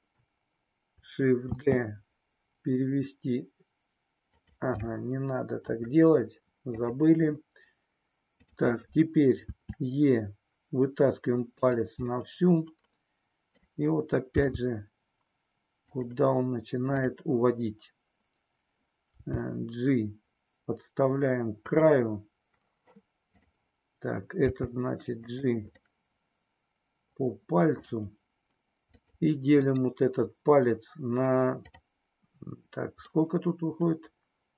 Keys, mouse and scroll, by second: 1.5 shift+d, 4.4 click, 5.5 Delete, 8.3 click, 9.4 e, 12.3-13.6 middle drag, 14.4 g, 16.9 click, 19.1 g, 21.6 click, 24.4 g, 25.3 click, 25.8 scroll up 1, 25.9-27.9 middle drag, 29.8-33.0 right drag, 33.0-34.5 middle drag.